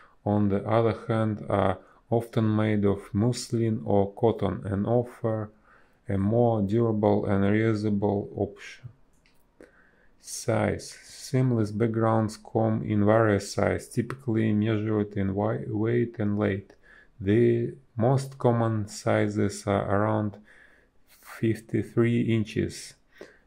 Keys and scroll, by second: 2.7 ctrl+z, 4.6 space, 7.6 space, 10.2 space, 11.0 space, 13.6 b, 16.5 a, 17.7 space, 20.1 space.